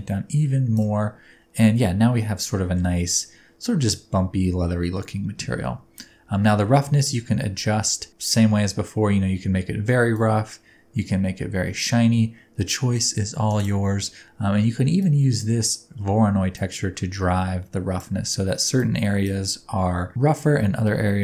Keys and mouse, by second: 0.8-2.3 middle drag, 2.5 shift+middle drag, 5.6 middle click, 6.8 shift+middle click, 8.1 click, 10.2-13.7 middle drag, 15.0 middle click, 16.6-18.0 drag, 18.7-19.4 drag.